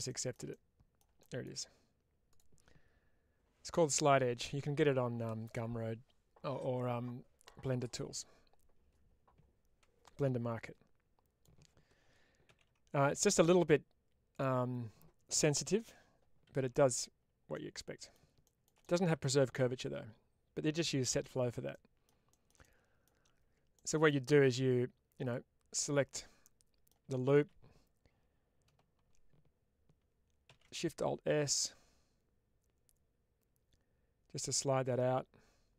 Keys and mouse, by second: 0.4 middle click, 10.0-11.3 middle drag, 14.2 click, 16.3 ctrl+x, 17.4 middle click, 18.7-20.9 middle drag, 21.6 middle click, 23.6 middle click, 26.0 middle click.